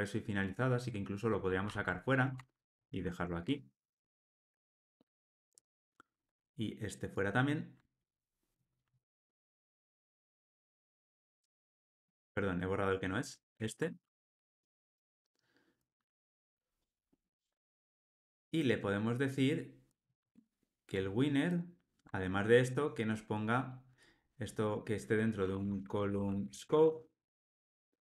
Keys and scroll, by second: 1.7 super+x, 4.5 super+v, 9.0 super+BackSpace, 9.8 super+BackSpace, 10.3 ctrl+alt+o, 11.8 super+z, 14.5 alt+super+l, 14.8 ctrl+alt+o, 21.5 super+b.